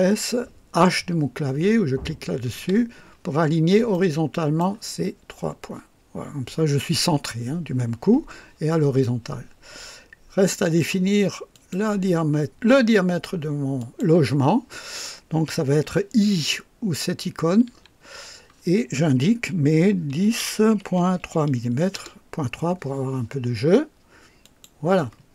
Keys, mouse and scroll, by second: 2.5 h, 3.9-4.8 right drag, 11.5 click, 13.8 click, 17.7 i, 20.1 KP_1, 20.4 KP_0, 20.8 KP_Decimal, 21.2 KP_3, 21.9 KP_Enter, 24.4 click.